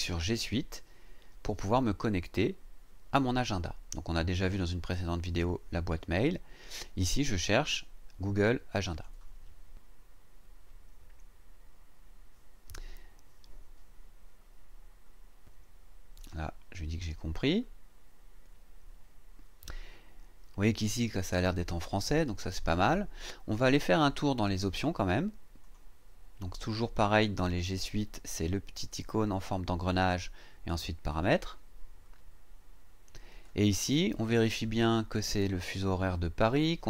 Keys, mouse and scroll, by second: 2.2 click, 8.9 click, 16.2 click, 25.6 click, 31.1 click.